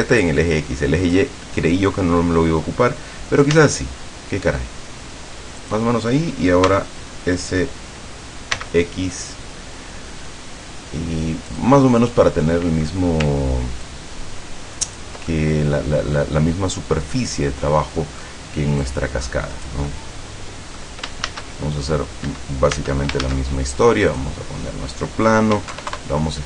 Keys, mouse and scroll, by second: 3.7 s, 5.7 click, 6.8 s, 8.7 x, 11.6 click, 11.9-13.1 middle drag, 14.0-15.3 ctrl+drag, 15.5-18.5 ctrl+middle drag, 18.9-20.0 drag, 20.0-21.0 middle drag, 21.0 click, 21.4 shift+a, 22.4 Escape, 22.9 Tab, 23.3 shift+a, 24.2 click, 25.7 s, 25.8 KP_7, 26.0 KP_Enter.